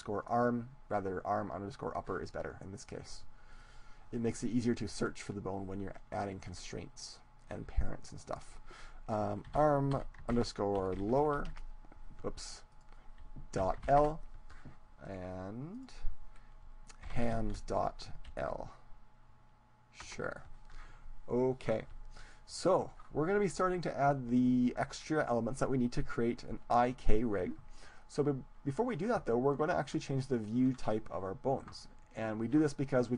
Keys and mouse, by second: 3.2-4.8 right drag, 3.6-5.4 drag, 12.5-14.3 drag, 15.0-16.9 right drag, 15.8-17.6 drag.